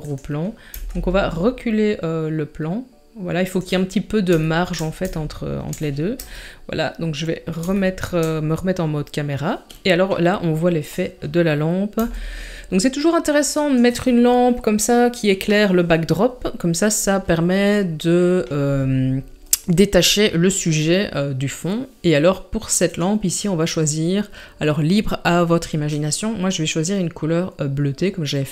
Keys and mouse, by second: 0.7 g, 4.6 shift+middle click, 5.1-5.7 shift+middle drag, 6.2 KP_0, 7.8-8.1 shift+middle drag, 10.9 click, 12.0 g, 22.9 click.